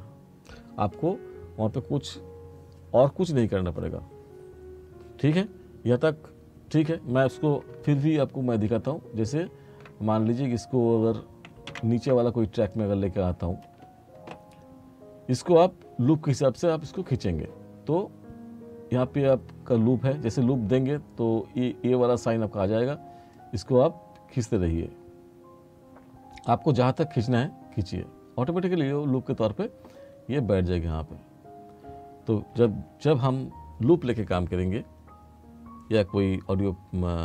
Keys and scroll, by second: 11.8 ctrl+z.